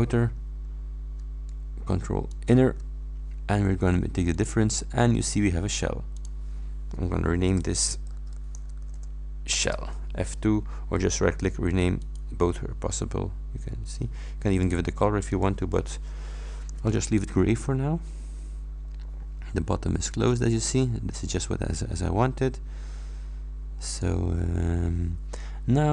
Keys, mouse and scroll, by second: 2.3 ctrl+click, 4.4 middle click, 6.2 middle click, 7.6 F2, 8.0-9.4 typing, 9.6 Return, 12.1 right click, 14.6 click, 15.4 click, 17.1-23.9 middle drag, 17.3-23.9 drag.